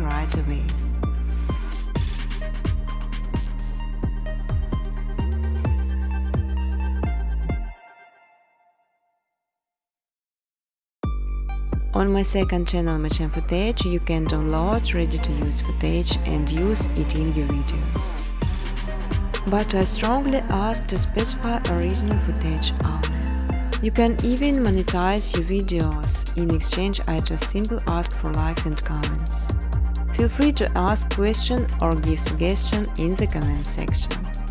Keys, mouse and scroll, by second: 1.4 click, 2.5 click, 6.4 click, 11.0-12.4 typing, 13.4 Return, 16.0 click, 16.4-17.2 typing, 17.0 click, 20.4 click, 21.2 space, 23.3 space, 24.8 click, 26.6 click, 27.2 n, 27.9 click, 28.1 space, 30.3 space, 30.5 space.